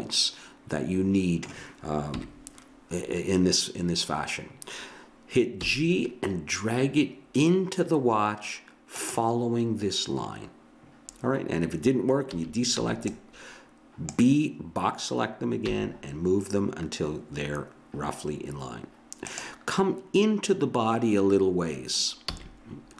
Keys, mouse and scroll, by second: 2.1 KP_1, 5.6 g, 12.3 a, 12.8 b, 15.6 g, 22.3 a.